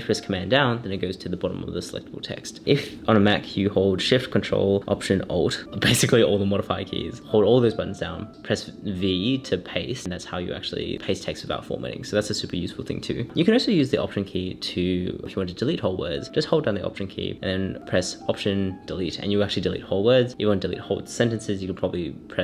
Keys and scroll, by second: 0.0 super+Down, 0.7 shift+super+Down, 0.9 shift+super+Up, 5.7 Return, 6.6 shift+Return, 12.4 alt+shift+super+v, 16.4 alt+BackSpace, 19.9 alt+super+BackSpace, 20.5 super+BackSpace.